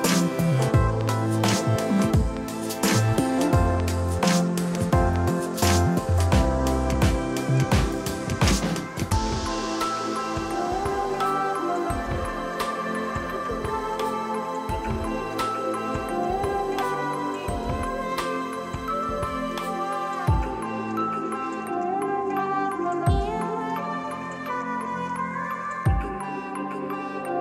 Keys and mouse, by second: 5.4 click, 6.7 ctrl+shift+x, 7.7 click, 9.3 KP_0, 9.7 KP_2, 9.7 Return, 11.4 click, 15.6 ctrl+1, 15.8 click, 17.0 shift+click, 17.4 click, 22.2 click, 22.9 ctrl+shift+x, 24.2 click.